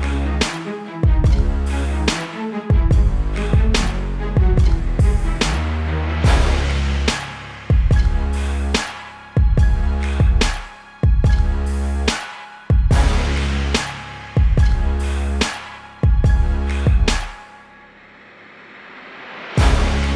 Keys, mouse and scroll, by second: 19.2 click, 20.0-20.1 scroll up 1.